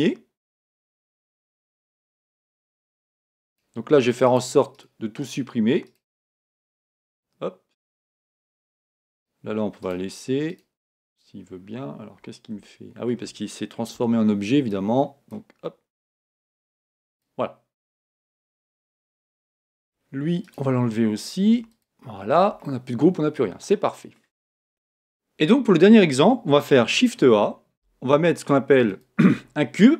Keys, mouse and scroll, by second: 0.7 scroll down 1, 0.9 scroll up 1, 3.5-7.6 right drag, 6.8 x, 7.8-12.3 right drag, 11.7-15.2 middle drag, 11.7 scroll up 1, 13.9 b, 16.8 x, 18.3-21.1 middle drag, 20.4-22.4 right drag, 21.1-21.5 scroll up 1, 21.5 x, 22.4-24.6 middle drag, 26.8 shift+a, 27.7 shift+a.